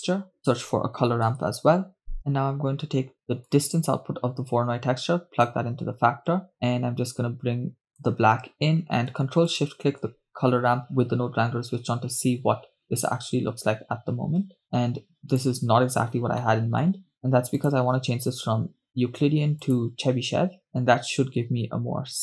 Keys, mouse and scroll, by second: 5.1-5.7 drag, 6.5-8.2 drag, 10.4 ctrl+shift+click, 13.8-14.6 scroll up 3, 15.1 click, 17.3 middle click, 17.3 scroll up 2, 18.4-20.5 drag.